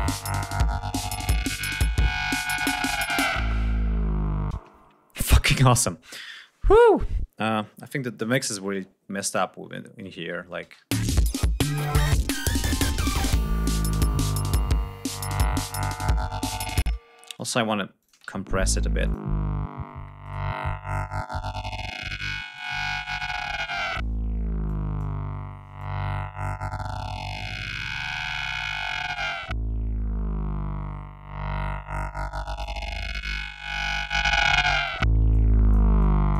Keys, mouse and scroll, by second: 4.1 space, 4.5 ctrl+scroll up 2, 5.2 ctrl+scroll down 3, 7.5-8.1 scroll down 5, 8.8 ctrl+click, 9.2 ctrl+scroll up 2, 9.9 ctrl+s, 10.2 ctrl+space, 10.4 ctrl+scroll up 2, 13.7 click, 16.4 space, 16.9 click, 17.5 click, 17.7 space, 17.9 ctrl+scroll up 2, 18.6 click, 19.8 right click, 22.1 click, 24.2 click, 25.3-32.3 drag, 33.4 click, 34.8-35.4 drag, 35.5 click.